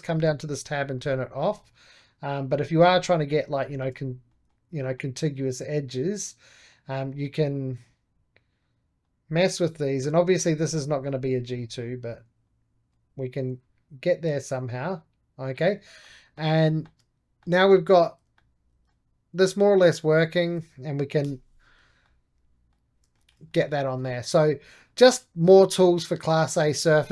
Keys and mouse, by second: 0.0-3.5 drag, 3.5-6.6 shift+middle drag, 6.6-11.4 drag, 11.7-15.3 drag, 15.9-20.0 middle drag, 20.0-21.1 drag, 21.1 j, 21.3 click, 21.9-24.5 middle drag, 24.5 3, 24.7-27.1 drag.